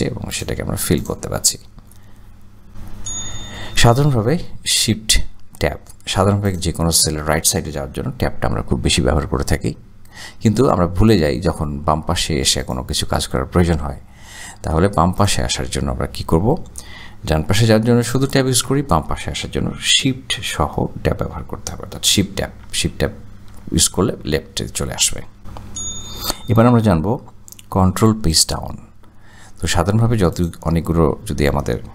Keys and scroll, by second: 8.7 Tab, 8.9 Tab, 9.2 Tab, 18.4 Tab, 18.6 Tab, 22.4 shift+Tab, 24.0 shift+Tab.